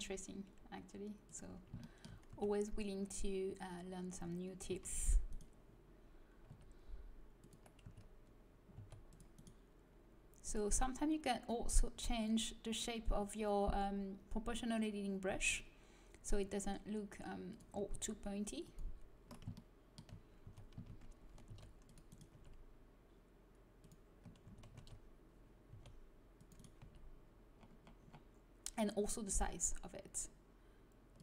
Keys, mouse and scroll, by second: 2.2 a, 4.6 c, 6.4 g, 7.8 a, 8.7 c, 10.4-14.4 drag, 17.8 g, 19.6-21.4 middle drag, 20.4 a, 21.4 c, 22.2 g, 24.4 a, 24.8 x, 25.6 c, 26.7 g.